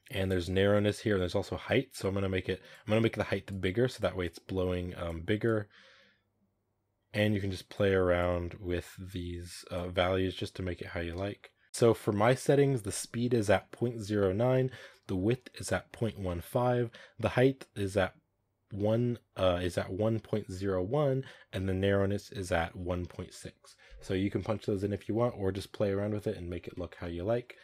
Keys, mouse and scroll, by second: 11.3 shift+middle click, 11.4 scroll up 2, 27.1-27.4 middle drag, 27.4 scroll up 1.